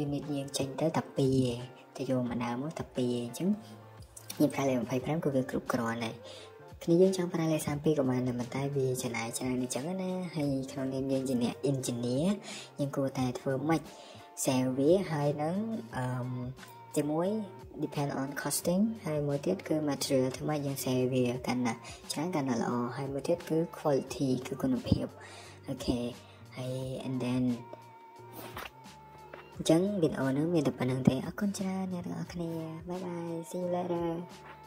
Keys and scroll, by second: 3.0 Escape.